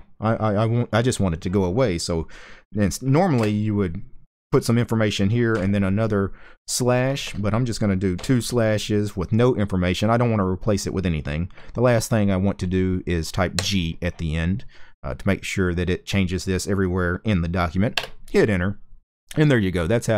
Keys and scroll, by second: 3.0 space, 5.2 typing, 6.7 space, 7.8 /, 13.2 g, 17.6 Return.